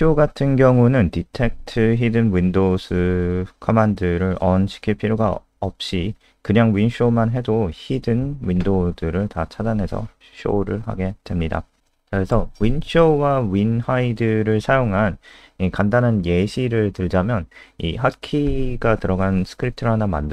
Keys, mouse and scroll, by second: 0.3-2.1 typing, 2.4 Down, 2.6 Tab, 3.3 End, 3.9 ctrl+shift+Left, 4.3-5.5 typing, 5.2 shift+Home, 7.0 click, 10.4 click, 13.2 click, 14.7-15.1 scroll down 1, 15.8 click, 16.2 ctrl+a, 16.4 Insert, 17.5 Delete, 18.9 Return, 19.0-20.3 typing.